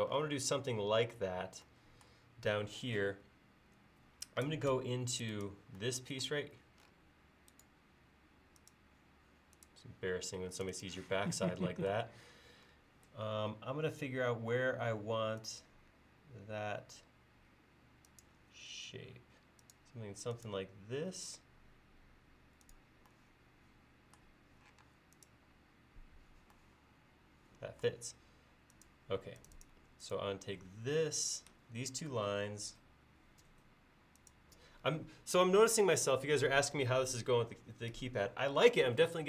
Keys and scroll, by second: 4.8 space, 13.3 l, 24.8 space.